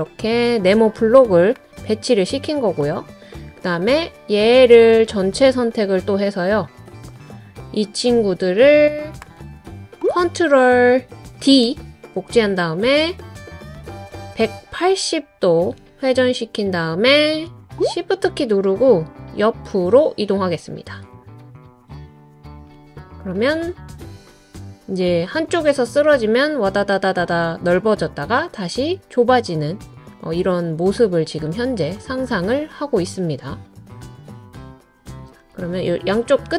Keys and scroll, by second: 11.4 super+d.